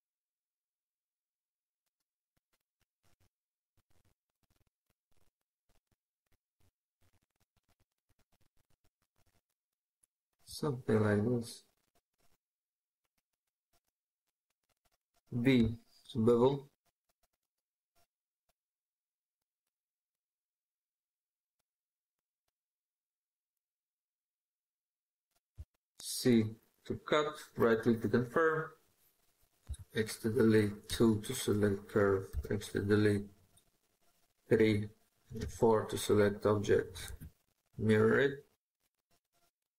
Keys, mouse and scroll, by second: 0.5 ctrl+click, 3.6 ctrl+click, 5.6 ctrl+click, 7.6 ctrl+click, 13.8 right click, 15.4 b, 23.4 right click, 25.4 c, 27.5 right click, 29.5 x, 36.1 typing, 36.9 alt+x.